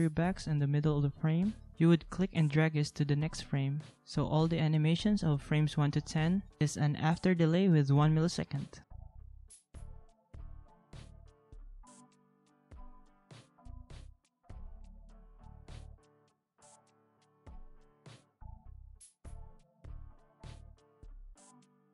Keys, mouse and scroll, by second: 4.8 ctrl+a, 9.5 ctrl+a, 12.0 ctrl+a, 14.5 ctrl+a, 17.4 ctrl+a, 21.4 ctrl+a.